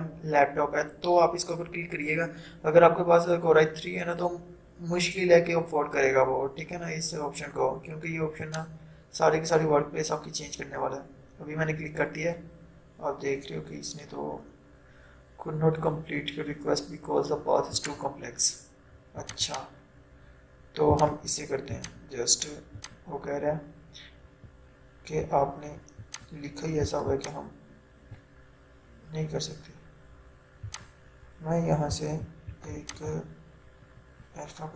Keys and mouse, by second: 8.5 click, 17.8 click, 26.1-30.7 drag.